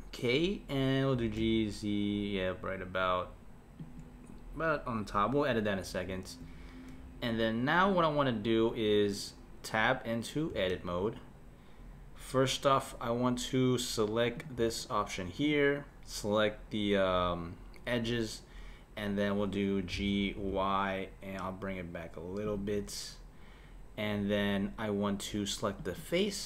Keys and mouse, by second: 1.1 g, 10.5 Tab, 14.4-15.5 drag, 19.9 g, 25.8-26.4 drag.